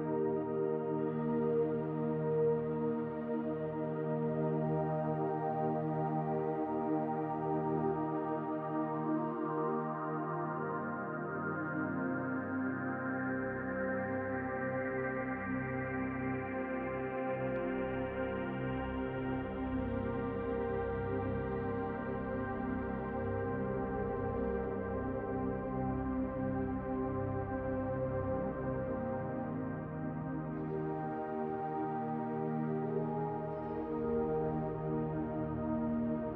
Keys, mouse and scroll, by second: 1.4 alt+shift+click, 3.2 alt+shift+click, 5.3 alt+shift+click, 7.5 alt+shift+click, 9.4 alt+shift+click, 11.0 alt+shift+click, 13.3 alt+shift+click, 15.4 s, 20.3 click, 21.4 alt+shift+click, 23.7-24.7 alt+shift+drag, 26.0 alt+shift+click, 27.0 alt+shift+click, 28.1 alt+shift+click, 29.4 alt+shift+click, 33.8 click.